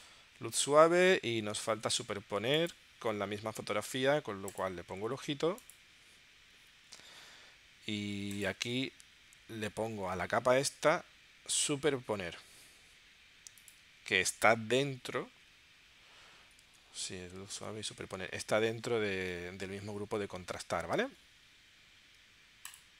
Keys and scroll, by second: 0.7 super+Tab, 1.7 super+Tab, 16.7 super+Tab, 17.6 super+Tab.